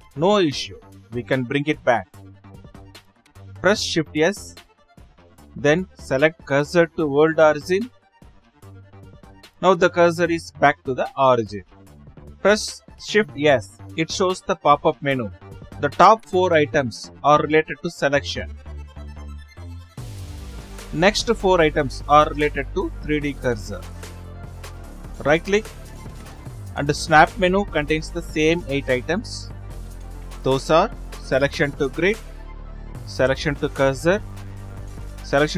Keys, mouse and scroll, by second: 10.4 shift+s, 15.2-17.0 right drag, 24.6-35.5 drag.